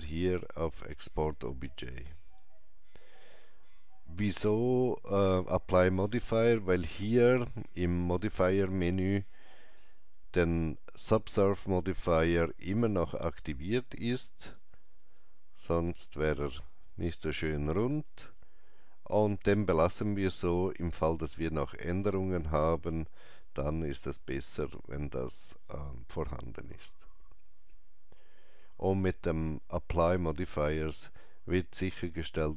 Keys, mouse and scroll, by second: 2.3 click, 8.7 click, 14.4 click, 20.3 scroll up 1, 22.7 scroll down 1.